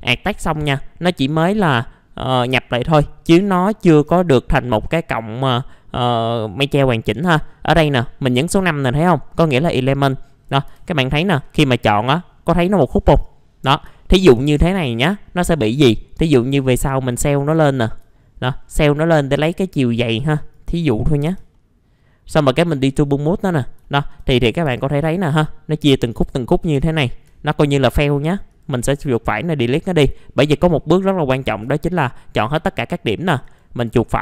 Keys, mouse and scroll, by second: 0.0 middle click, 0.4-1.8 scroll up 1, 1.8 middle click, 3.9 5, 4.7 click, 5.4-7.3 scroll down 1, 7.3-8.1 scroll up 1, 10.7 F2, 11.0 click, 14.3 scroll up 1, 16.2-17.3 drag, 17.6 alt+middle click, 18.6-19.0 scroll up 1, 19.0 middle click, 20.2-21.2 click, 21.5 middle click, 22.8 click, 23.3 scroll down 1, 24.6 F4, 24.9-25.4 scroll down 1, 26.9 shift+click, 28.5 right click, 29.2 click, 30.1 middle click, 30.4 scroll up 1, 31.5 ctrl+a, 31.9-33.1 scroll up 1, 33.4 right click.